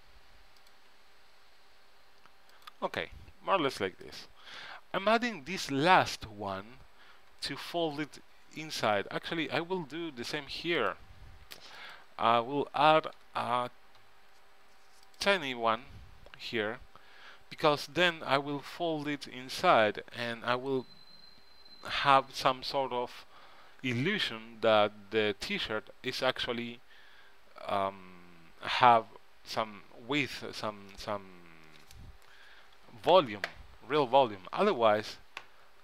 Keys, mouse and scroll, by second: 1.1 e, 3.0 e, 8.6 middle click, 11.0-13.7 drag, 13.4 e, 25.6-30.6 middle drag.